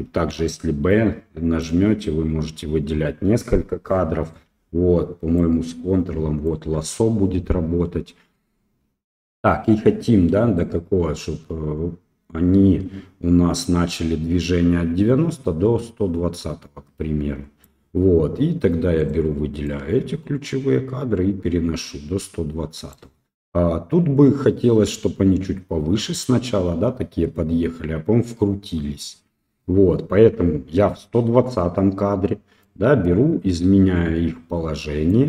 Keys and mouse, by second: 0.2 b, 5.4-6.5 ctrl+drag, 10.6-17.6 drag, 19.0 right click, 19.6-22.9 right drag, 32.7 right click.